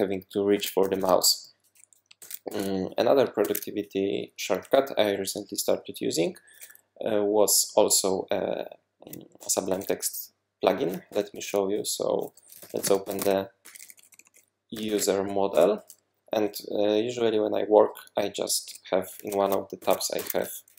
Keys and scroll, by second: 0.0-1.5 typing, 2.2 super+w, 2.5 super+w, 3.4 super+1, 11.1 super+p, 12.3-15.4 typing, 15.5 Return, 19.8 super+2, 20.2 super+1.